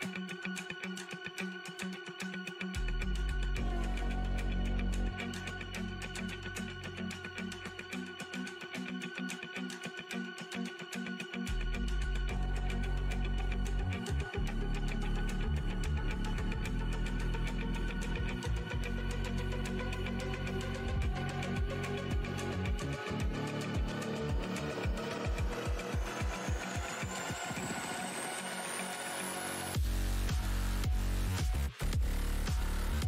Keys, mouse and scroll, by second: 0.7-1.1 alt+scroll, 2.2 alt+scroll, 2.7 alt+click, 5.2 Delete, 6.0-6.8 scroll down 1, 6.8 scroll down 1, 6.8 scroll up 1, 8.1 alt+scroll up 1, 9.0 shift+click, 9.8 F8, 11.3 click, 15.2 space, 18.0 v, 18.3 shift+x, 20.1 right click, 20.3 click, 20.7 shift+x, 22.0 right click, 22.4 click, 23.3 F8, 23.9 click, 24.3 shift+x, 24.9 space, 25.7 scroll down 1, 26.2-27.0 typing, 26.4 scroll down 1, 27.1 click, 28.2-28.6 scroll down 1, 28.8 w, 30.9-32.3 scroll up 1, 32.5 alt+click.